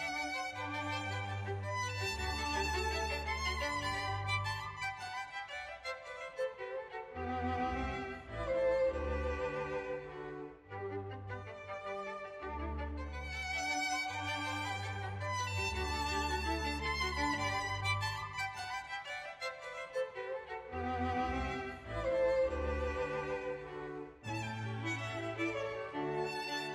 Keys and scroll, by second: 0.0 Page_Down, 0.6 Page_Down, 1.8 Page_Up, 3.1 Page_Down, 5.7 Page_Up, 5.8 Page_Down, 6.0 Page_Down, 6.1 Page_Up, 6.3 Page_Down, 7.6 Page_Down, 9.0 Page_Down, 10.1 Page_Down, 11.1 Page_Down, 12.1 Page_Down, 12.7 Page_Up, 12.8 Page_Down, 13.0 Page_Down, 13.8 Page_Down, 14.3 Page_Down, 14.8 Page_Down, 15.0 Page_Down, 15.3 Page_Down, 15.8 Page_Down, 17.1 ctrl+s, 17.8 Page_Up, 18.0 Page_Down, 18.4 Page_Up, 18.7 Page_Down, 19.1 Page_Down, 19.3 Page_Down, 19.4 Page_Down, 19.7 Page_Down, 20.2 Page_Down, 20.6 Page_Down, 20.8 Page_Down, 21.0 Page_Up, 21.1 Page_Down, 21.3 Page_Up, 21.6 Page_Down, 21.7 Page_Up, 21.9 Page_Down, 22.1 Page_Down, 22.3 Page_Down, 22.5 Page_Down, 22.7 Page_Down, 23.2 Page_Down, 23.4 Page_Down, 23.6 Page_Up, 23.7 Page_Down, 24.0 Page_Down, 24.2 Page_Down, 24.4 Page_Down, 24.7 Page_Down, 24.9 Page_Down, 25.2 Page_Down, 25.4 Page_Down, 25.6 Page_Down, 25.8 Page_Down, 26.0 Page_Down, 26.2 Page_Down, 26.4 Page_Down.